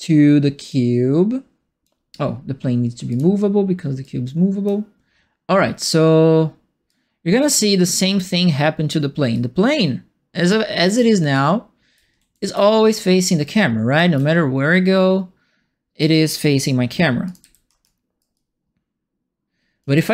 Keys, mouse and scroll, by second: 0.6-1.8 drag, 3.0 click, 4.0 click, 6.8-8.1 drag, 9.3-10.4 drag, 10.8-12.5 right drag, 10.9 w, 11.3 q, 12.1 a, 13.4 click, 14.1-15.9 right drag, 14.1 a, 17.2 click, 17.4 f, 17.8 alt+right click, 18.3-19.8 alt+drag.